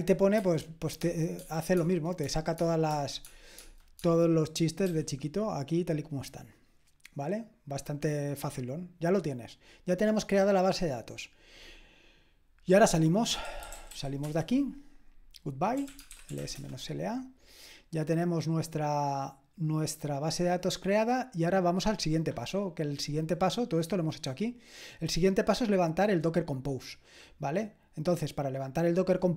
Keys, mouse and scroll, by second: 1.7-4.8 typing, 13.1-14.4 typing, 15.6-16.9 typing, 21.6-22.9 drag, 22.9-24.3 scroll down 1, 24.3-27.3 scroll down 1, 27.3-28.0 scroll down 1, 28.0-28.9 scroll down 1, 28.9-29.3 drag.